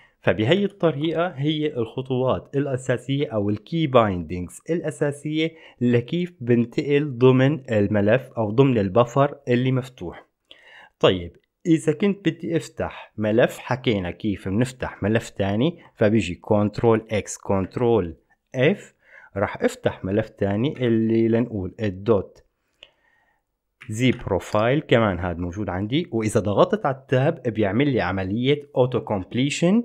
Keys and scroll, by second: 0.5 alt+b, 0.8 alt+b, 17.0 ctrl+x, 17.8 ctrl+f, 24.0-25.2 typing.